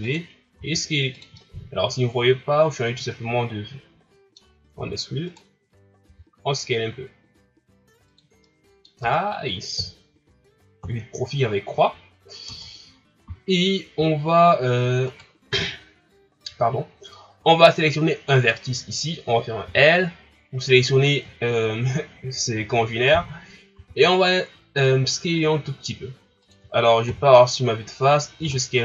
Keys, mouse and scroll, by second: 0.5 s, 1.4-4.4 middle drag, 4.8 e, 8.4 middle click, 9.0 Tab, 9.8 KP_1, 10.8 KP_3, 12.4 Tab, 15.1 right click, 18.3 right click, 19.6 l, 21.4-23.7 shift+scroll down 1, 23.7 s, 27.1 KP_1, 28.4 s.